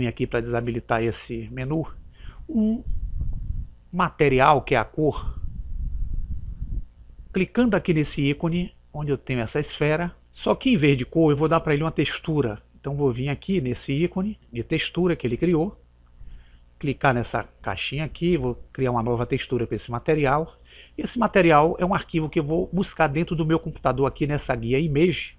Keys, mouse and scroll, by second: 0.3 n, 4.8-6.6 drag, 9.6 click, 15.5 click, 17.6-20.6 drag.